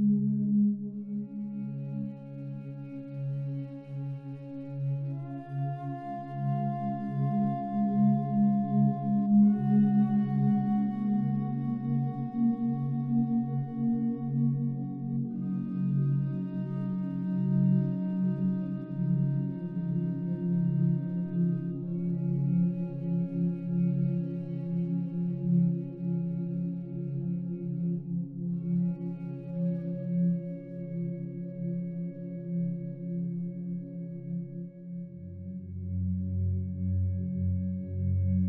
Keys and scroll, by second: 25.9 ctrl+t.